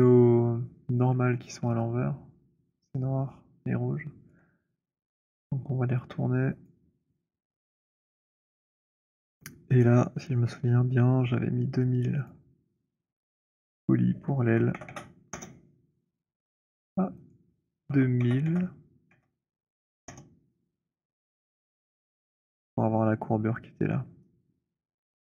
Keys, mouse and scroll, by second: 1.3 middle click, 4.2 alt+click, 6.4 click, 7.6 click, 12.2 click, 13.6 click, 14.2-15.3 typing, 17.2 click, 17.7-18.5 typing, 20.0 typing, 21.6 w, 25.2 right click.